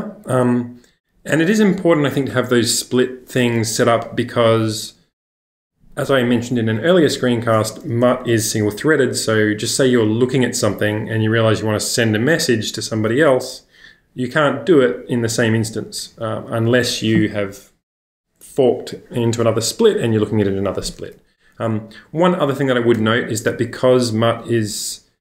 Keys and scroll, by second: 22.9 u.